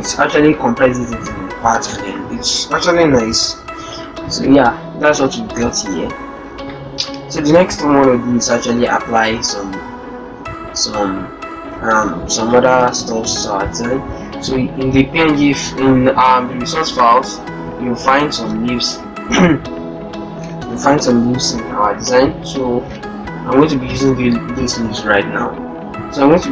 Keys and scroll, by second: 3.3 ctrl+-, 5.0 ctrl+0, 5.6 ctrl+-, 9.9 alt+Tab, 12.0 Tab, 12.2 Tab, 20.4 alt+Tab, 22.9 alt+Tab.